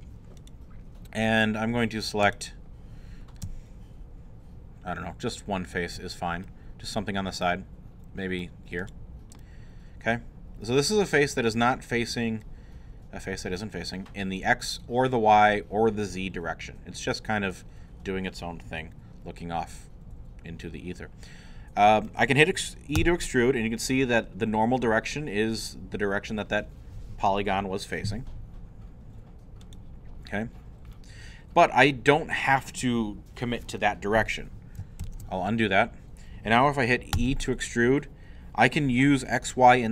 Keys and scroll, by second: 23.0 e, 35.0 ctrl+z, 37.1 e.